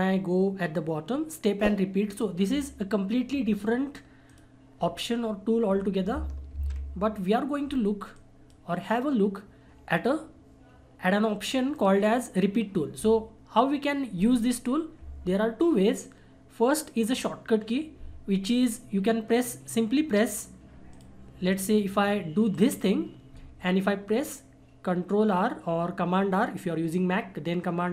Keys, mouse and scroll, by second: 2.1 click, 6.5 ctrl+z, 8.1-11.1 drag, 11.7 click, 20.9 click, 22.5 right click.